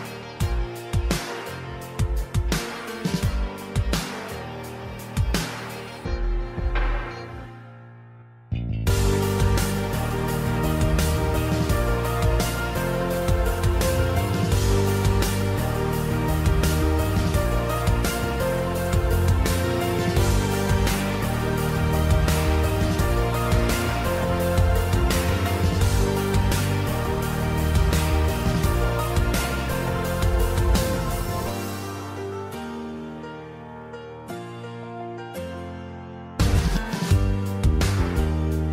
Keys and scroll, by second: 3.5 super+d, 3.7 super+d, 5.8 super+d, 6.0 super+d, 6.1 super+d, 19.3 Delete, 23.5 z, 23.8 z, 25.5-26.5 typing, 29.4-30.2 typing, 31.7 typing, 34.9-38.2 typing.